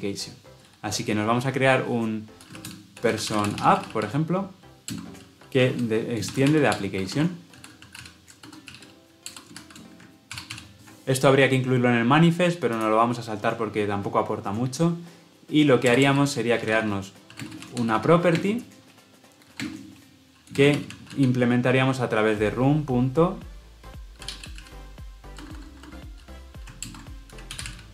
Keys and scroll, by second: 9.2 Return, 10.2 ctrl+alt+l, 10.4 ctrl+alt+o, 26.8 alt+Return.